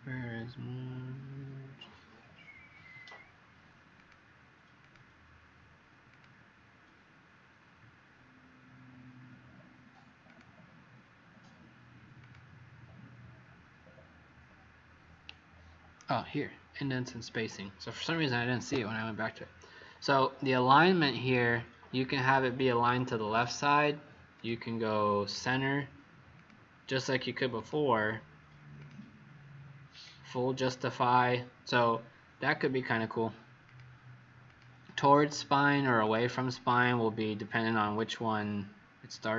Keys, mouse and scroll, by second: 3.9 click, 36.6 click, 37.9 click.